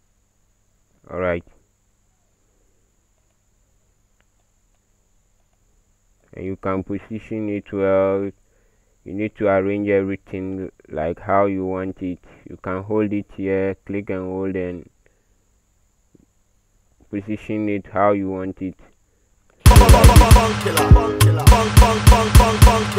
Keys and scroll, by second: 19.7 space, 19.9 space, 20.2 space, 21.5-22.6 typing.